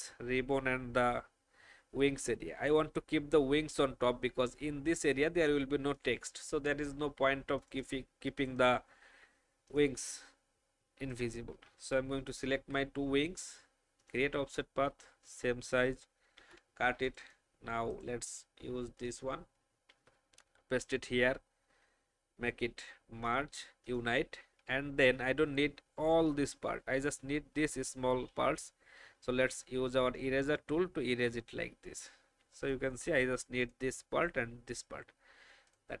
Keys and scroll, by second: 12.5 ctrl+alt+f, 16.3 ctrl+x, 19.9 ctrl+f, 28.7 shift+e.